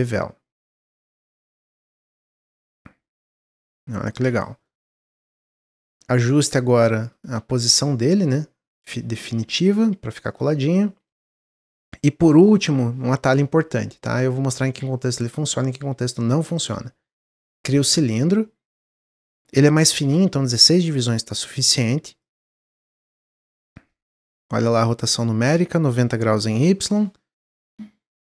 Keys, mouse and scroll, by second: 0.0-1.6 drag, 2.0-4.4 shift+drag, 4.6-6.3 middle drag, 6.3 click, 6.6-8.0 middle drag, 8.0 click, 10.2 click, 10.5-12.3 middle drag, 12.3-16.8 drag, 17.9-18.8 middle drag, 18.8-21.4 drag, 22.9-24.8 drag, 25.5-27.3 drag, 27.3-28.2 middle drag.